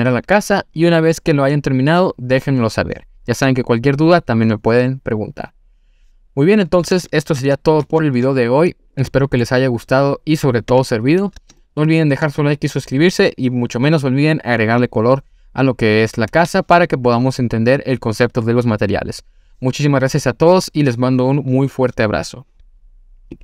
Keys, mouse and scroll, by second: 7.0 click, 7.4 ctrl+z, 7.9 ctrl+z, 8.5-9.1 scroll down 1, 9.1-9.4 middle drag, 9.1 scroll down 1, 10.5 click, 10.7 Tab, 11.0-11.5 scroll up 2, 11.6 shift+middle click.